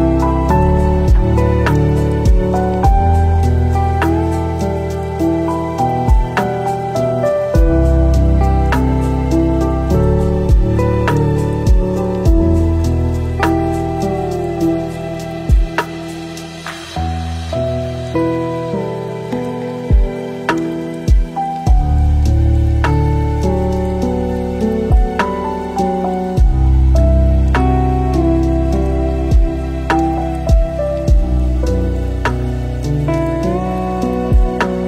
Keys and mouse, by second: 2.1-2.7 drag, 4.1 click, 8.6 middle click, 9.2 middle click, 9.8 middle click, 11.2 middle click, 11.7 ctrl+shift+click, 12.5 middle click, 13.9 middle click, 14.1 click, 14.8 click, 15.3 ctrl+shift+click, 17.1-18.0 drag, 20.9-23.1 shift+drag, 23.2 space, 27.3 click, 29.0-30.7 drag, 31.7-33.1 drag, 33.3 ctrl+z, 33.8 ctrl+z, 34.0 ctrl+z.